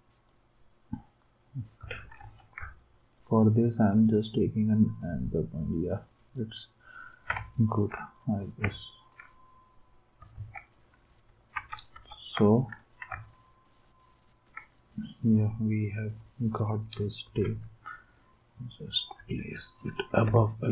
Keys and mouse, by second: 2.1 ctrl+r, 10.4 ctrl+s, 11.5 alt+Tab, 17.2 Up, 17.4-19.1 Up, 20.2 space.